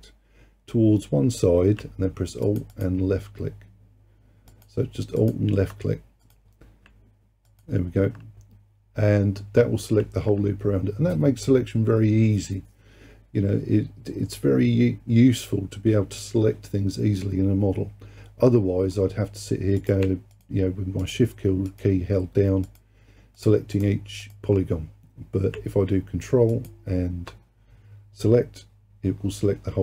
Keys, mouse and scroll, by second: 2.5 alt+click, 2.8 alt+click, 4.5 alt+click, 5.2 alt+click, 6.3 click, 7.5 alt+click, 19.8 click, 20.4 shift+click, 21.0 shift+click, 21.7 shift+click, 22.7 shift+click, 23.4 shift+click, 23.8 shift+click, 24.2 shift+click, 26.6 alt+click.